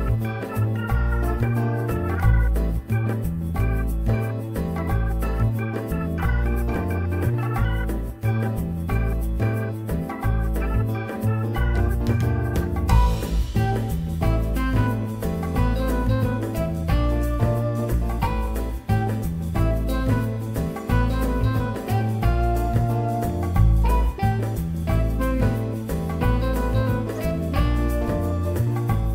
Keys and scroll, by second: 5.4 F3, 6.6 F3, 8.7 F3, 10.9 F3, 12.0 q, 12.7 1, 13.0 alt+q, 13.5 F4, 15.5 ctrl+r, 17.9 ctrl+shift+c, 22.0 F4, 22.8 F4, 25.6 F4, 26.8 F4, 27.5 alt+q, 28.8 alt+x.